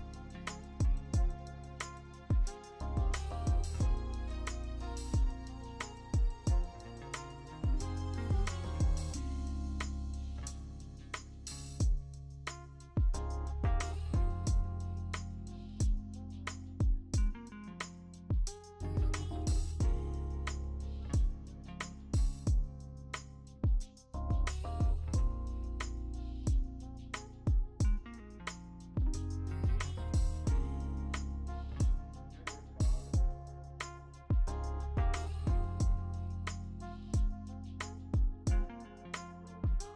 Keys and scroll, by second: 0.0 x, 1.2 x, 1.6 x, 5.1 x, 6.5-7.3 x, 7.4 v, 11.3 ctrl+v, 14.6 ctrl+d, 15.1 l, 25.3 BackSpace, 32.1 BackSpace, 33.2 BackSpace.